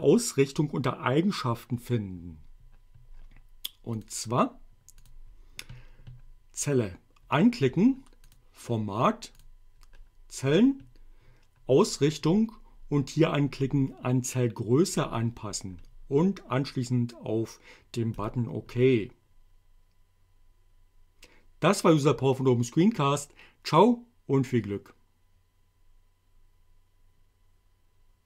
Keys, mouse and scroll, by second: 4.0 click, 5.1 click, 8.3 click, 9.4 click, 15.0 click, 18.3 click.